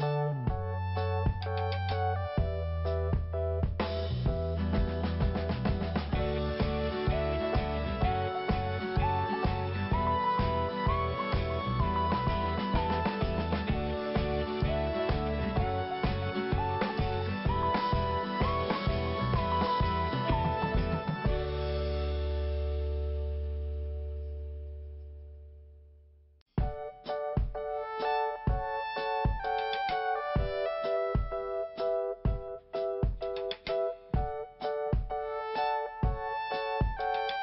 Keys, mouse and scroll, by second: 2.3 scroll up 1, 3.8 click, 6.6 click, 6.7 click, 7.5 click, 9.1 scroll down 1, 10.7 click, 10.8 click, 11.4 click, 13.5 click, 13.6 click, 14.6 click, 16.5 click, 16.5 click, 17.4 click, 20.1 click, 21.2 click, 22.2 click, 24.1 click, 25.5 click, 29.7 click, 32.9 click, 33.0 click, 34.6 click, 36.7 click, 36.8 click, 36.8 click.